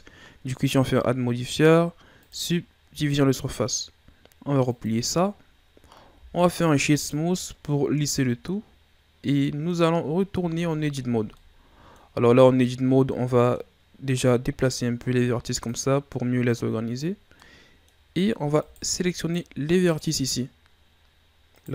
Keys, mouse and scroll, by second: 2.3-3.8 drag, 4.7-6.1 drag, 6.1 w, 7.5 scroll down 2, 7.7-10.0 middle drag, 10.0-10.4 scroll up 3, 10.4 Tab, 11.0-11.4 ctrl+scroll down 2, 11.4 middle click, 12.2 scroll up 2, 13.1-14.3 middle drag, 14.3-17.4 drag, 17.4-18.6 middle drag, 18.6 shift+right click, 19.2 shift+right click, 19.8 shift+right click, 21.5 shift+right click.